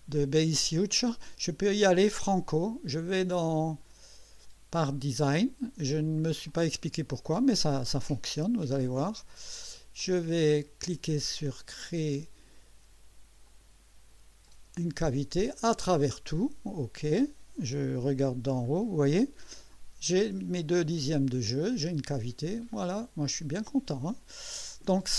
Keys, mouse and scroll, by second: 3.7 click, 4.7 click, 6.5 click, 10.0-10.7 drag, 11.8 click, 13.5 click, 14.5 click, 15.5-16.2 drag, 17.0 click, 17.9 2, 18.7-19.0 scroll up 2, 21.3-21.6 scroll down 2, 22.1-23.8 drag.